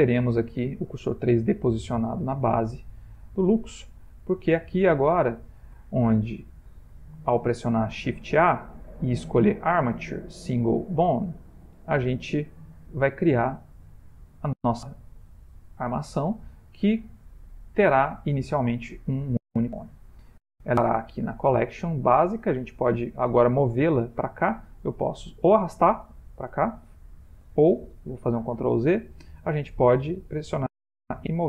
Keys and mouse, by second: 0.6 middle click, 4.0 click, 4.9 ctrl+middle click, 5.0 ctrl+middle click, 6.1 shift+middle click, 6.3 shift+middle click, 7.5 shift+a, 12.6 ctrl+middle click, 13.4 middle click, 18.8 ctrl+middle click, 19.6 shift+middle click, 21.7 click, 25.1 click, 28.6 ctrl+z, 30.9 m.